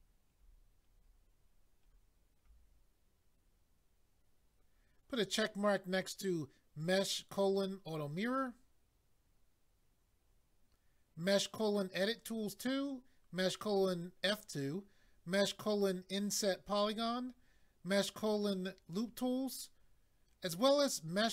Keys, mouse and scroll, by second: 2.5-2.9 scroll down 1, 16.8-18.0 scroll down 1.